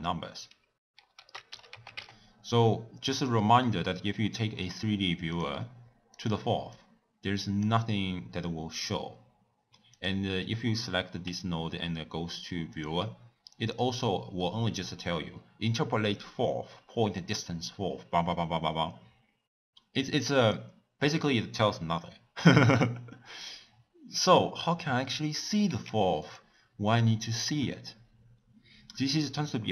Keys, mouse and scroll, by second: 1.2 ctrl+a, 6.7 drag, 10.0 click, 11.3 w, 14.4-17.4 middle drag, 20.0 click, 25.1 drag, 25.9 x, 26.3 click.